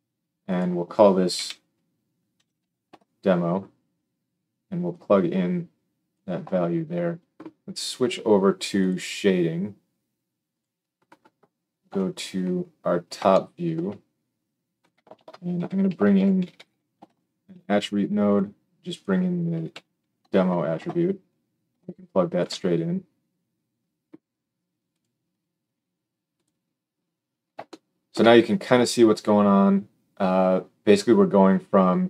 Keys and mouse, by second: 0.4-8.8 drag, 8.9-10.4 middle drag, 10.4 click, 10.6-18.8 middle drag, 11.8 KP_7, 15.1 shift+a, 16.5 r, 18.8-22.4 drag, 22.4 ctrl+shift+middle click, 24.8 click, 31.4-32.0 middle drag.